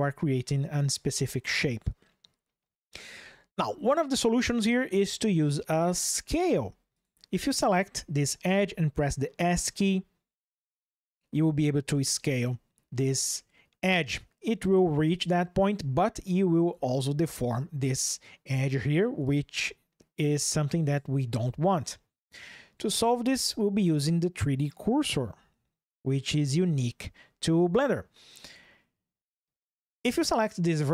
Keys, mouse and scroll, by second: 6.7 shift+click, 8.6 s, 16.5 Escape, 18.7 ctrl+shift+3.